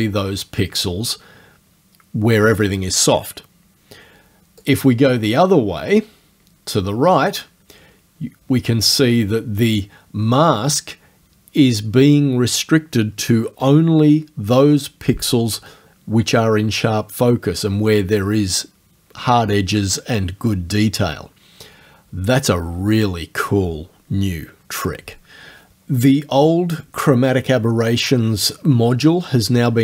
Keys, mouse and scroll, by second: 4.6-11.9 drag.